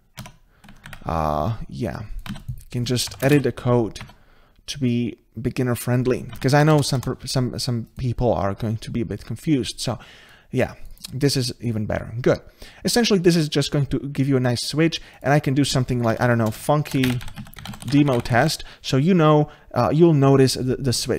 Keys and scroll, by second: 0.2 Tab, 0.9 ctrl+z, 2.3 ctrl+c, 3.3 ctrl+v, 6.5 ctrl+shift+Right.